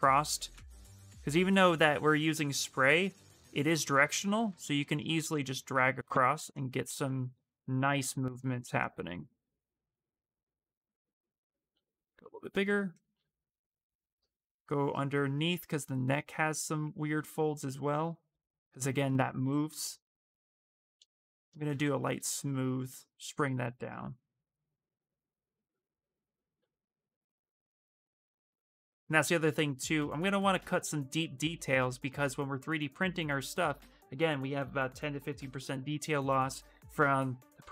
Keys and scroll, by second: 11.5 s, 17.5 ctrl+z, 21.9 shift+space, 30.0 s.